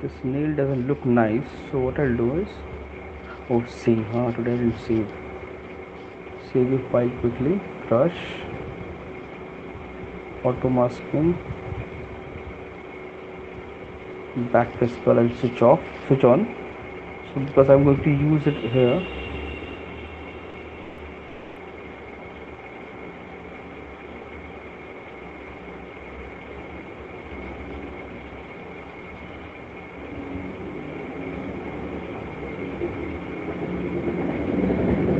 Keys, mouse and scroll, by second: 0.8 click, 4.2 9, 6.3 alt+click, 7.8 click, 10.0 scroll down 1, 12.3 scroll down 1, 13.3 scroll down 1, 15.9-16.7 [, 17.4 ], 19.2 alt+click, 19.8 [, 20.8 alt+click, 21.2 alt+click, 21.7 alt+click, 22.1 alt+click, 23.3 alt+click, 23.7 alt+click, 25.0 alt+click, 25.4 alt+click, 26.6 alt+click, 29.7-30.4 shift+click, 31.4 click, 34.1 alt+click, 34.5 alt+click, 34.9 click.